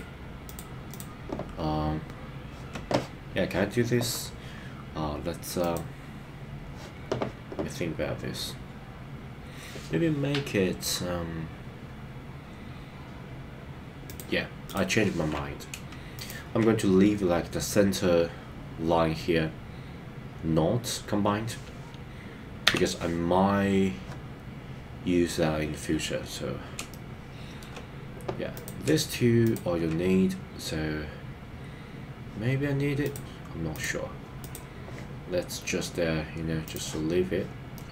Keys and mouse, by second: 16.1 shift+click, 22.8 f, 26.9 shift+middle click, 33.7 click, 37.7 middle click.